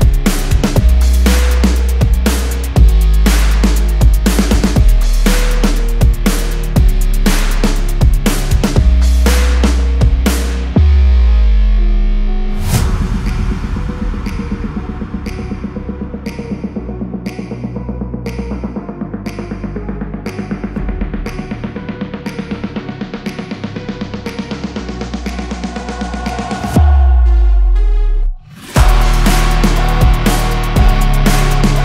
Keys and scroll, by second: 0.2 space, 0.5 Escape, 2.0 Escape, 12.6 space, 13.0 Escape, 15.2 Escape, 16.4 ctrl+r, 26.8 F3, 27.1 Escape, 27.7 F2, 30.9 ctrl+g.